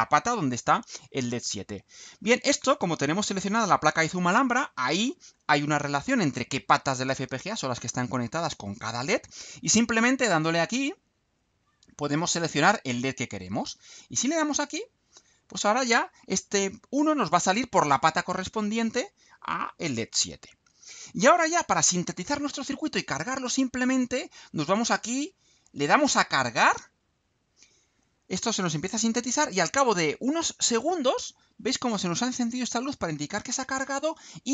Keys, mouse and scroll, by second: 1.7 click, 10.9 click, 12.3 scroll down 2, 12.9 scroll down 2, 15.1 click, 26.9 click.